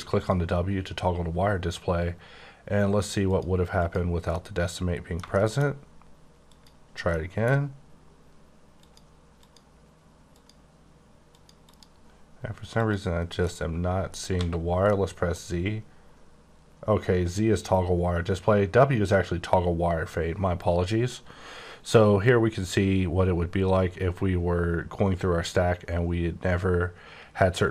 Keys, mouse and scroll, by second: 0.2 click, 3.3 click, 4.3 middle click, 6.5 click, 7.1 middle click, 8.7 click, 9.4 click, 10.3 click, 11.3 click, 11.7 click, 13.2 click, 13.4 middle click, 14.3 z, 14.8 middle click, 15.8-17.2 scroll up 4, 17.2-18.0 scroll down 1, 18.0-18.6 scroll down 3, 18.6-19.9 scroll down 1, 19.9-21.8 scroll up 3, 23.6-23.9 scroll up 5, 24.0-24.9 scroll down 4, 24.9-26.1 scroll up 5, 26.1-27.7 scroll down 3.